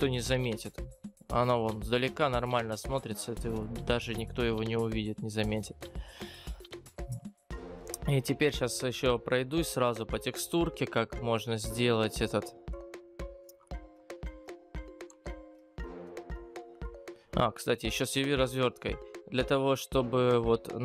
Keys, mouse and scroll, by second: 0.9-2.0 scroll down 11.